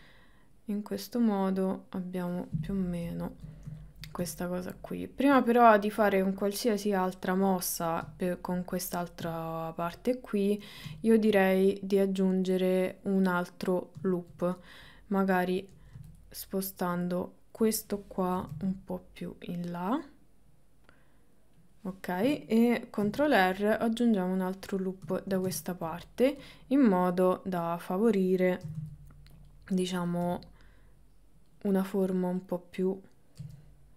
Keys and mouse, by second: 3.2 shift+middle click, 3.8 ctrl+middle click, 9.6 shift+middle click, 11.1 shift+middle click, 14.1 shift+middle click, 16.2 click, 18.4 g, 23.1 ctrl+r, 25.2 ctrl+middle click, 25.6 shift+middle click, 26.4 click, 28.7 g, 30.0 click, 30.3 g, 31.8 click, 33.4 g.